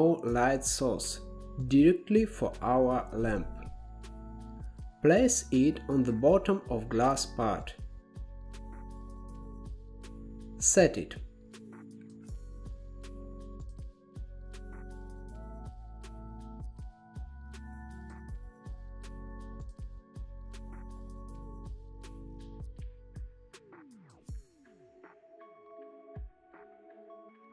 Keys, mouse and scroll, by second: 1.8 click, 3.3 g, 5.6 KP_1, 6.8 shift+middle click, 7.2-7.9 scroll up 1, 7.9 g, 9.8-11.1 drag, 11.1 KP_0, 13.4-15.5 drag, 15.9-17.9 middle drag, 18.3 KP_0, 19.9 ctrl+b, 23.3 scroll up 4, 24.0 shift+middle click, 24.7 scroll down 1, 25.9-26.2 drag, 27.1 click.